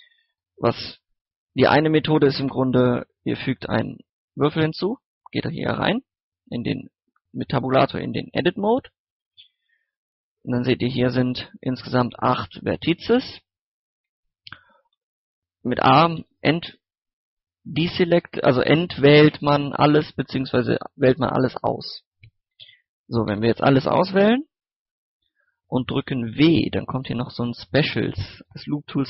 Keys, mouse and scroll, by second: 0.8 Tab, 2.1 shift+a, 3.4 click, 3.7 scroll down 1, 3.9 middle click, 4.2 scroll up 1, 4.5 middle click, 4.8 Tab, 9.1 middle click, 10.4 right click, 12.1 shift+right click, 12.5 shift+right click, 13.5 scroll down 1, 13.6 middle click, 13.7 scroll up 1, 14.1 middle click, 14.6 a, 16.2 a, 20.6 typing, 22.4-23.3 typing, 26.1 w.